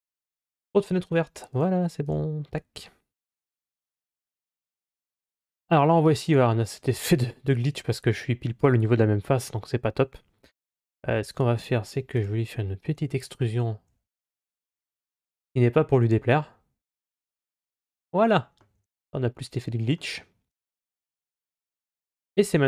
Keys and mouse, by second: 1.3 right click, 1.9 right click, 4.7-5.2 middle drag, 5.7-9.2 middle drag, 11.4 Tab, 12.0-13.7 right drag, 13.7 e, 18.1 middle click, 18.6 Tab, 18.9-19.8 middle drag, 20.3 right click, 20.7 Tab, 21.4 Tab, 21.7 right click, 22.1 Tab.